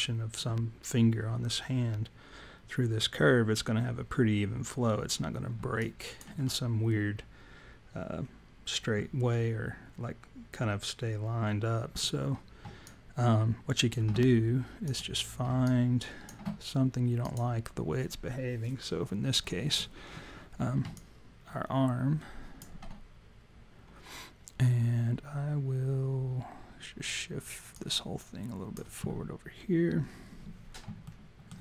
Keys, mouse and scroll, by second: 5.9 alt+click, 12.9 alt+click, 14.9 click, 15.7 alt+click, 17.3 click, 21.0 alt+click, 27.8 click, 31.1 alt+middle click.